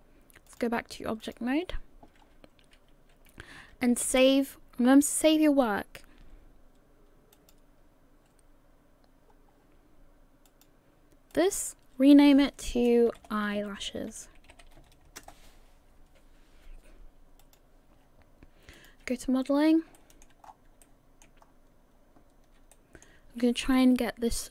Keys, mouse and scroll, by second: 0.5 click, 2.2-2.7 scroll down 1, 2.7-3.5 scroll down 1, 3.9 ctrl+s, 7.3 click, 8.7-9.3 scroll up 2, 9.3-10.4 scroll down 1, 10.5 click, 11.3 click, 11.9 click, 17.4 click.